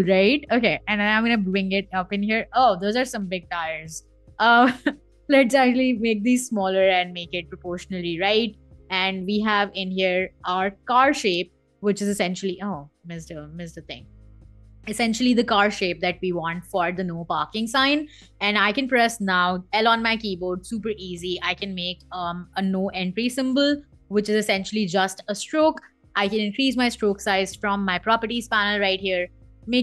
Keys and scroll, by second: 10.6 super+g, 12.2 super+z, 14.4 super+g, 18.1 l, 21.5 shift+x, 23.4 v.